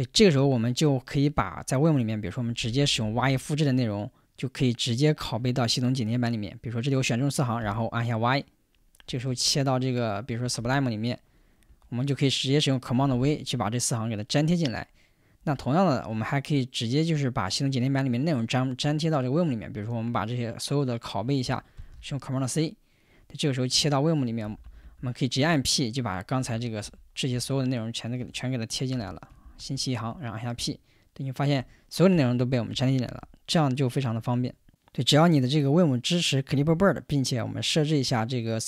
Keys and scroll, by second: 2.6 typing, 3.9 typing, 7.6 y, 9.3 super+Tab, 10.4 super+Tab, 11.7 Return, 13.1 super+v, 21.8 super+c, 24.4-25.3 typing, 26.4-33.7 typing.